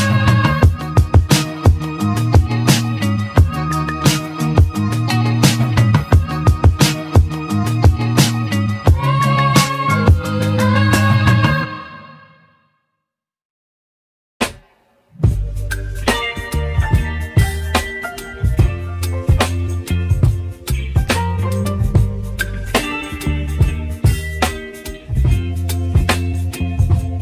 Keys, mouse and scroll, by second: 0.5 `, 1.6-3.1 shift+middle drag, 3.1 shift+click, 3.6 middle click, 4.0-4.6 scroll down 1, 4.6-5.6 shift+middle drag, 5.6 ctrl+b, 9.2-9.7 scroll down 1, 9.7-11.5 shift+middle drag, 11.5-12.0 scroll down 1, 12.0-13.2 shift+middle drag, 13.2-14.3 scroll up 3, 14.3-15.8 shift+middle drag, 15.8 Tab, 16.5 1, 17.5-20.8 drag, 20.8 1, 21.7 click, 23.4 click, 23.9 click, 24.7 Tab, 25.4 1, 25.9 click.